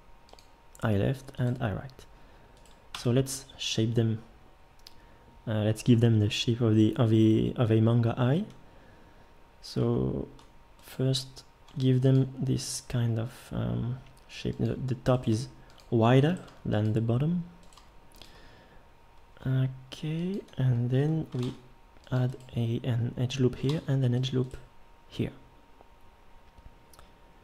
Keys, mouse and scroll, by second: 2.9 Tab, 11.7 g, 12.7 g, 15.3 g, 16.4 g, 17.8 g, 19.4 g, 21.4 ctrl+r, 23.7 ctrl+r.